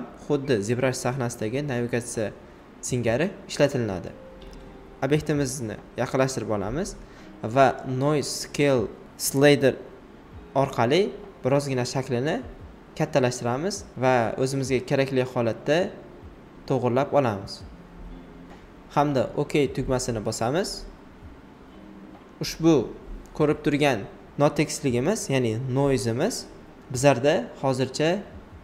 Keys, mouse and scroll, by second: 20.4-25.1 drag, 25.3 click.